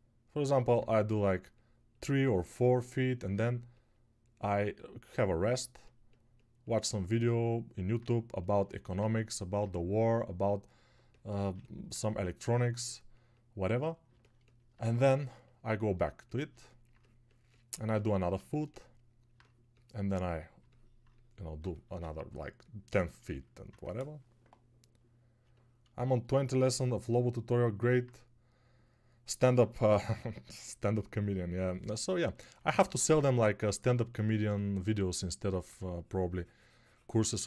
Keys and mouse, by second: 25.8 alt+shift+click, 25.8 alt+shift+middle click, 25.8 alt+shift+right click, 32.7 ctrl+click, 32.7 ctrl+middle click, 32.7 ctrl+right click.